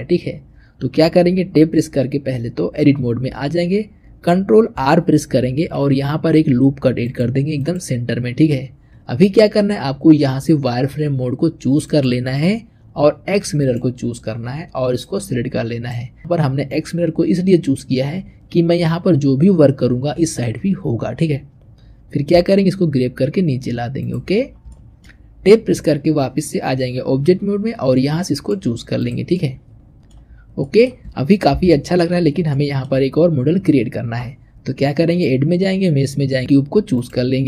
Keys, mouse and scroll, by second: 1.4 Tab, 5.3 ctrl+r, 11.7 click, 13.5 click, 14.9 click, 22.2 g, 24.3-24.6 scroll down 2, 24.6-25.6 shift+middle drag, 25.6 Tab, 28.2 click, 28.8 click, 29.2-30.4 middle drag, 30.4 scroll down 1, 30.5 middle click, 31.4 KP_1, 32.1-32.4 scroll up 1, 32.4-34.9 shift+middle drag, 34.9-37.0 drag.